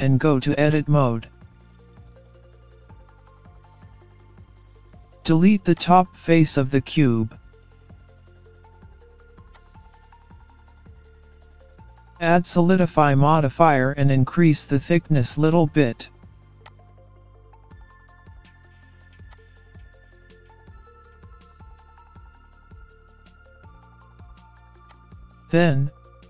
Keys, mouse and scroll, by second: 1.7 middle click, 3.4-4.4 scroll down 2, 4.4 Tab, 5.8 click, 8.6 Delete, 9.8 scroll up 1, 10.0 middle click, 12.8 click, 17.2 scroll up 1, 17.4 middle click, 18.4 scroll down 2, 18.6-19.2 scroll up 2, 19.3 click, 21.7 scroll up 1, 21.8 middle click, 24.8 click.